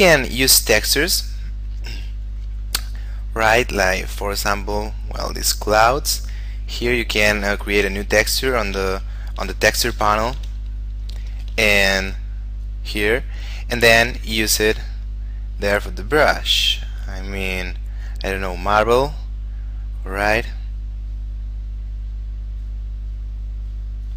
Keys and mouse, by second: 5.0 click, 9.1 shift+space, 11.0 click, 12.8 click, 23.4 click.